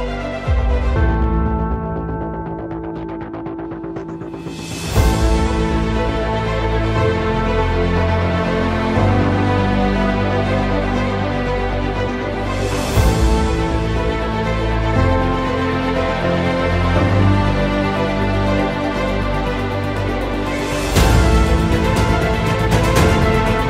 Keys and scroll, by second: 1.4 F3, 7.3 F3, 8.4 Escape, 9.1 shift+F2, 9.5 Escape, 9.7 F3, 10.1 Escape, 13.7 t, 14.9 Escape, 15.5 F2, 22.9 space.